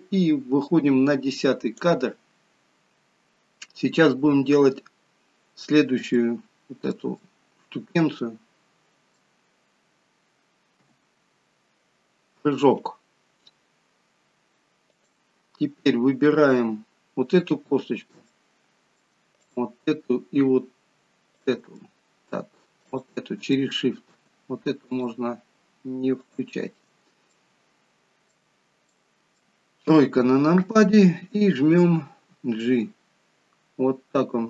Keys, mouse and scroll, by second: 4.8-6.0 scroll down 2, 6.0 scroll down 1, 6.1 shift+middle click, 7.2 middle click, 10.8 KP_3, 13.8-14.9 scroll up 1, 14.9 click, 16.2-16.8 scroll up 1, 16.8-17.5 scroll up 1, 18.3 middle click, 19.4 shift+click, 21.3 shift+click, 21.8 middle click, 22.9 shift+click, 23.7 middle click, 24.9 shift+click, 26.5 shift+click, 27.3 scroll down 1, 27.4 middle click, 28.9 middle click, 30.0 KP_3, 32.4 g.